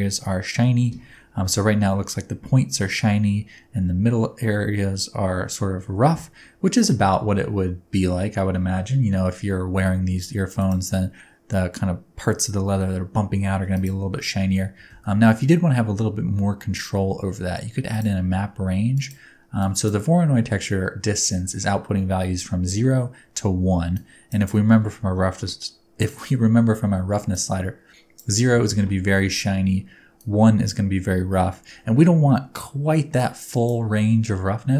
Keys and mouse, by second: 10.6 click, 14.5 middle click, 14.9 shift+a, 19.6 click, 24.0 click, 24.5 middle click, 27.3 middle click, 30.2 middle click, 33.3 click.